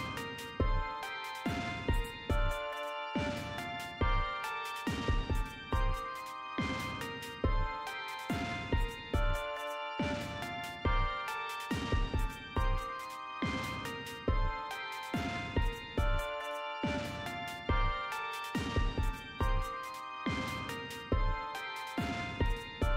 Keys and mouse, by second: 11.5 click, 16.7 click, 20.7 click.